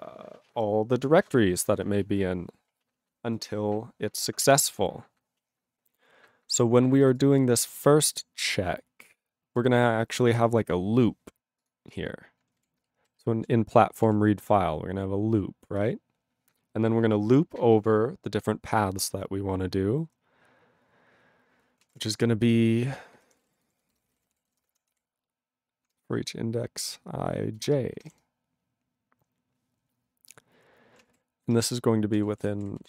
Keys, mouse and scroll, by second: 4.3-7.0 scroll down 5, 7.0 click, 7.1 click, 7.2 click, 7.9 click, 8.1 click, 9.6 click, 11.6 click, 11.7 click, 11.9 click, 11.9 click, 12.6 ctrl+n, 13.0 alt+b, 13.1 alt+b, 14.6 ctrl+e, 21.8 ctrl+a, 21.9 ctrl+o, 22.5 Tab, 23.0-25.9 typing, 27.6-28.1 typing, 31.1-32.8 typing.